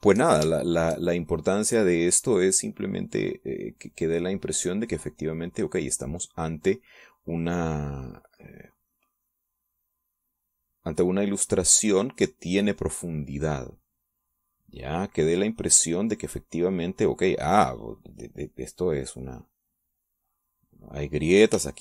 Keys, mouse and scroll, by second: 1.3 shift+click, 1.7-7.8 shift+drag, 9.0-21.8 drag.